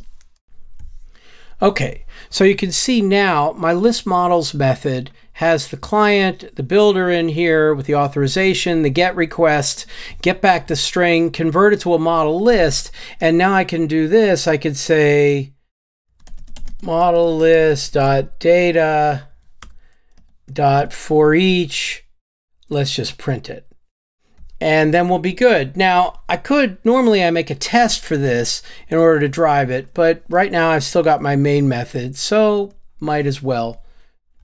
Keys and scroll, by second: 0.4 alt+shift+Up, 25.1 Tab, 30.5 Tab, 31.0 Tab, 32.9 Tab.